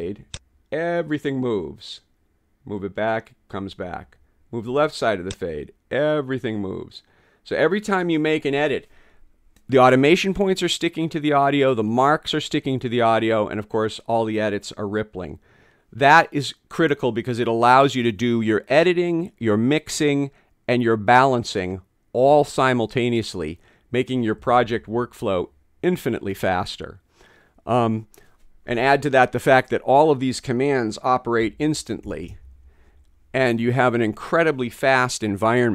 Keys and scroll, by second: 24.4 ↺.